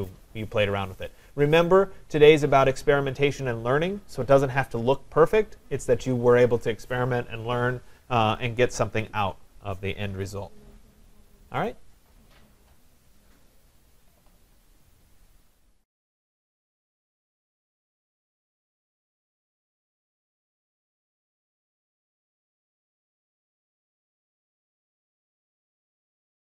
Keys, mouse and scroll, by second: 13.6-15.4 drag.